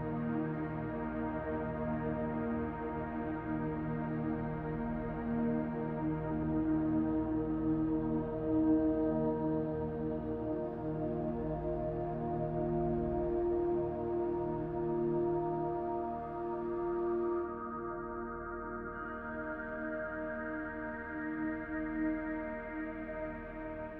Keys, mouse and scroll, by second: 0.2 click, 1.4 r, 3.0 click, 5.0 shift+d, 5.6 click, 6.9 r, 8.5 s, 9.5 click, 10.4 middle click, 11.2 shift+middle click, 11.7 scroll down 1, 12.1 shift+middle click, 12.6 scroll down 2, 13.0 shift+middle click, 13.5 middle click, 14.4-14.8 scroll down 1, 14.8 middle click, 15.9 shift+middle click, 16.7 middle click, 17.3 shift+middle click, 18.0 middle click, 19.4 shift+middle click, 21.7 shift+middle click, 22.7 middle click.